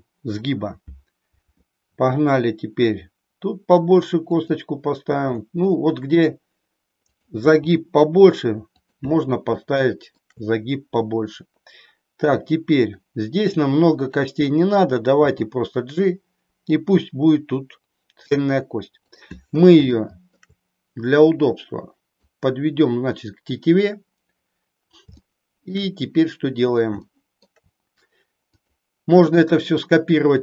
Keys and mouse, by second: 2.0 e, 4.5 click, 5.1 e, 7.4 e, 9.6 middle click, 15.1 g, 20.1 shift+middle click, 21.4 click, 25.2 shift+middle click, 27.0 shift+middle click, 28.5 click.